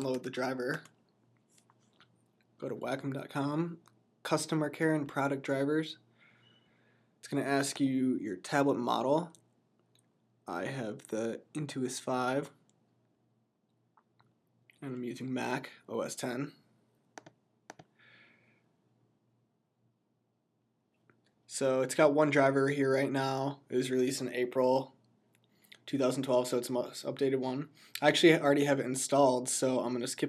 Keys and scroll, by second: 0.0-0.6 typing.